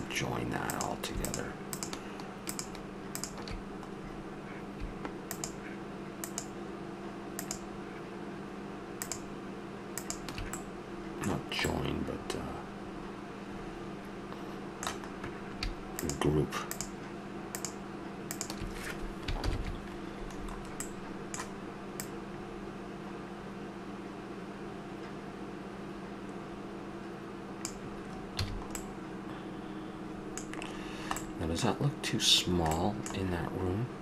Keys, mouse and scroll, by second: 0.7-4.0 right drag, 4.0-6.2 middle drag, 6.2-10.5 right drag, 10.5-11.8 middle drag, 12.4-13.2 middle drag, 14.6-16.0 middle drag, 16.0-20.1 drag, 19.4 ctrl+g, 20.3-21.9 middle drag, 21.9-23.6 drag, 28.4 a, 28.4-28.8 drag, 28.8-29.8 middle drag.